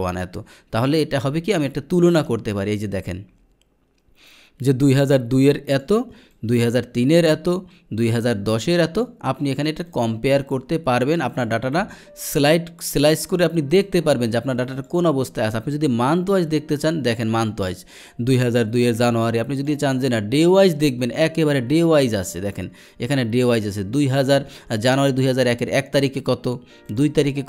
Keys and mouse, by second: 1.5 shift+click, 4.6-5.8 drag, 6.3-7.2 drag, 8.3-9.0 drag, 9.9-10.6 drag, 11.3 click, 13.3 click, 13.8 click, 14.7 click, 16.4-17.7 drag, 19.5 click, 20.5 click, 22.5-23.5 drag, 25.3 click, 26.9 click.